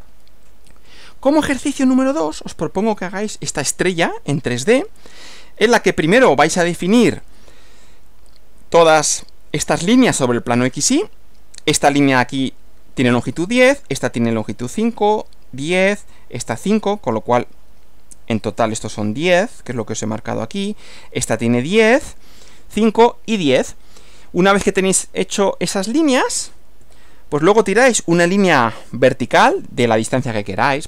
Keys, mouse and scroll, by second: 0.7 click, 1.8 Right, 5.7 Right, 25.8 click, 26.9 Right.